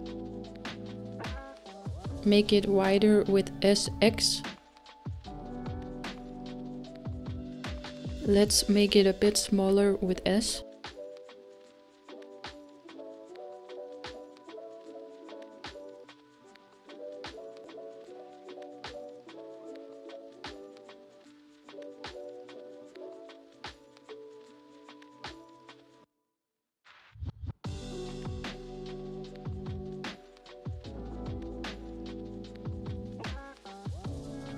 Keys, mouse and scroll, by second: 2.2 middle click, 3.1-4.6 scroll up 3, 4.6 s, 15.6-17.7 middle drag, 17.7 g, 32.4-33.4 scroll down 2, 33.4-34.5 middle drag.